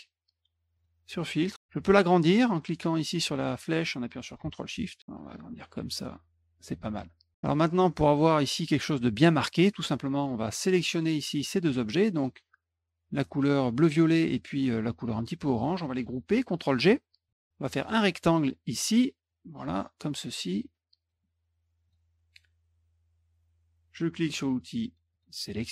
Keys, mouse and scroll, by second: 0.7 click, 2.3-6.6 drag, 10.9 click, 11.9 shift+click, 17.0 ctrl+g, 17.8 click, 19.3-21.1 drag, 21.8 click, 25.1 click.